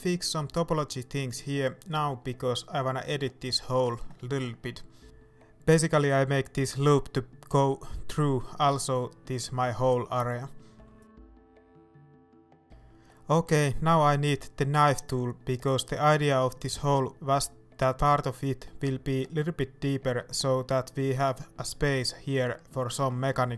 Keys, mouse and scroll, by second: 0.3 x, 2.4 right click, 2.7 Tab, 2.7-8.3 middle drag, 3.6-3.9 scroll up 2, 8.3 right click, 8.6-10.5 middle drag, 10.5 shift+right click, 10.9-18.0 middle drag, 12.2 j, 14.1 ctrl+KP_7, 16.2-16.6 scroll down 2, 16.8-18.0 scroll up 2, 18.0 k.